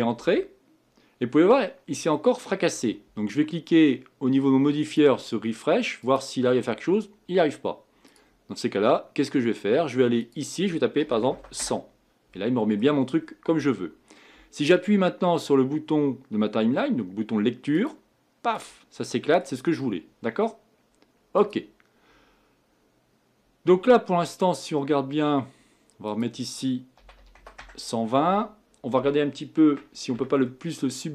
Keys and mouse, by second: 0.2 Tab, 4.8-11.3 drag, 11.3 KP_0, 18.8-24.1 drag, 19.0-21.4 middle drag, 29.5 Tab, 29.7 Tab, 30.1 Tab.